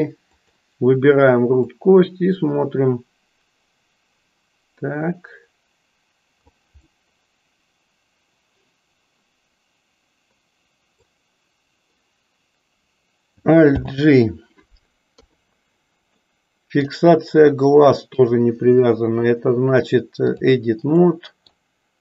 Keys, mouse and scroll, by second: 0.4 click, 1.8-6.4 drag, 6.9 scroll up 1, 7.0-11.3 middle drag, 13.8 alt+g, 15.1 KP_3, 16.1 middle click, 18.3-20.4 drag, 21.1 middle click.